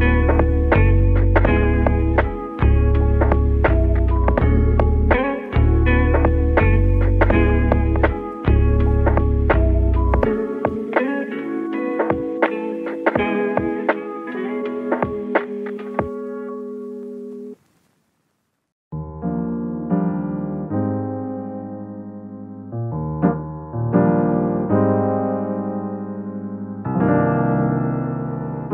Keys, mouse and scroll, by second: 0.5 click, 1.4 middle click, 2.4 click, 2.8 shift+click, 3.3 click, 4.6 scroll down 1, 4.8-6.4 middle drag, 6.4 click, 6.9 click, 7.8 shift+click, 9.5 alt+shift+click, 11.4 click, 12.3 click, 12.9 shift+click, 13.6 middle click, 14.4 shift+click, 14.8 shift+click, 15.4 shift+click, 16.2 middle click, 17.1 shift+click, 17.6 shift+click, 18.7 shift+d, 19.9 p, 21.3 Tab, 21.5 click, 22.0 Tab, 22.5-23.8 middle drag, 23.8 /, 24.3-25.4 middle drag, 25.4 click, 26.9 click, 27.9 click.